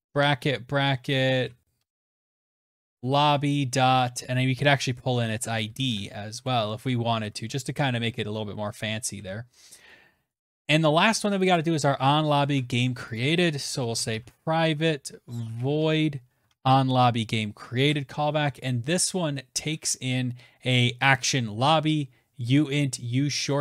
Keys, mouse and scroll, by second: 0.6-2.9 typing, 1.4 Left, 3.8 Down, 4.0 Down, 4.1 Down, 4.3 Down, 4.4 Down, 4.5 Down, 4.7 Down, 4.8 Down, 5.1 Return, 5.9 ctrl+z, 6.4 BackSpace, 6.8 Right, 7.0 Right, 7.2 Right, 8.5 ctrl+s, 8.9 scroll, 10.0 scroll, 10.6 click, 10.7 click, 11.6 ctrl+c, 12.3 click, 12.8 Return, 12.9-15.5 typing, 15.6 ctrl+v.